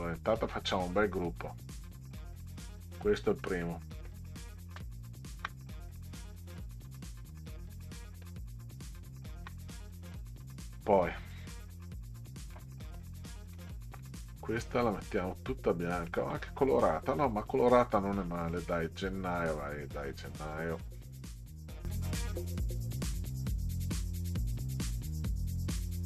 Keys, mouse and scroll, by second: 0.2 middle drag, 1.4-3.6 drag, 5.4 ctrl+g, 6.6-7.0 middle drag, 7.6 click, 9.2 ctrl+scroll down 2, 11.4 click, 12.6-13.0 middle drag, 13.7 ctrl+scroll down 2, 16.1-17.1 middle drag, 17.9 middle drag, 20.1 click, 21.2-21.9 drag, 22.1 click, 22.4 click, 22.7 click, 22.9 click, 23.0 middle click, 23.2 click, 23.6 click, 23.9 click, 24.3 click, 24.5 middle click, 24.9 click, 25.3 click, 25.7 click, 26.0 click.